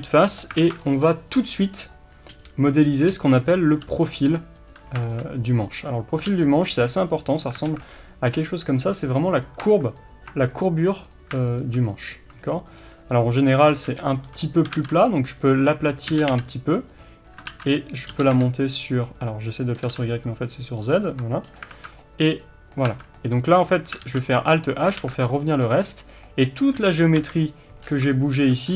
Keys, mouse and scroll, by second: 0.6 alt+a, 0.8 scroll up 1, 1.9 click, 2.3 g, 2.8 click, 3.1 g, 3.7 click, 3.8 g, 4.7 click, 6.3 g, 7.4 click, 7.7 alt+a, 7.9 scroll down 1, 8.3-9.6 scroll up 1, 9.6 Tab, 11.1 click, 13.7 s, 15.8 click, 16.1 g, 17.0 click, 17.5 ctrl+z, 18.2 g, 21.0 click, 21.1 Tab, 21.5 scroll down 1, 21.7 alt+z, 22.0-25.6 middle drag, 22.9 Tab, 23.0 scroll down 1, 24.0 alt+h, 25.0 alt+a, 25.6 scroll up 1, 26.7 KP_1, 27.3 middle click, 27.3 KP_3, 27.8-28.1 scroll down 1, 28.5 shift+scroll down 1.